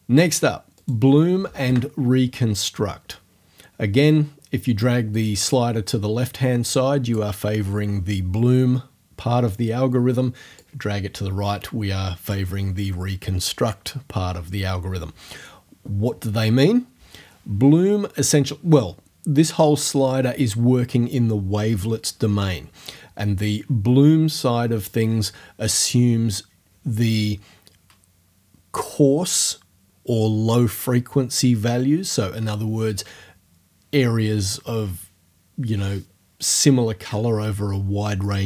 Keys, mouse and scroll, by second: 0.8 click, 1.5 0, 1.7 Return, 5.2-7.3 drag, 10.6-12.5 drag.